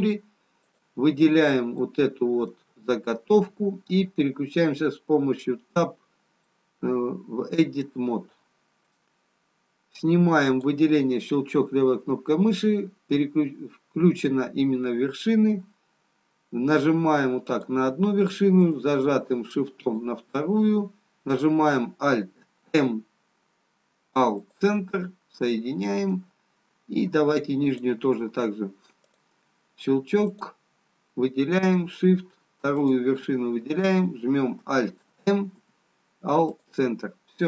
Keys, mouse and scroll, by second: 2.0 click, 2.0 middle click, 5.3 Tab, 6.6 middle click, 8.2-8.7 scroll up 2, 9.2 middle click, 9.2-9.8 scroll up 2, 11.0 click, 15.8-17.9 scroll down 1, 17.9 click, 20.1 shift+click, 22.6 alt+m, 25.4 middle click, 27.8 click, 32.9 shift+click, 33.7 shift+click, 35.7 alt+m.